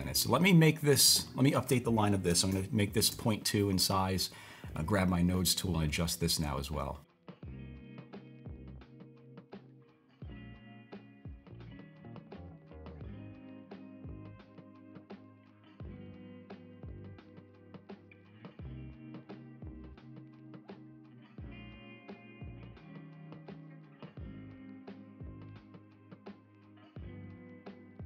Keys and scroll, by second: 2.0-3.0 typing, 3.1 Return, 13.0-13.8 typing.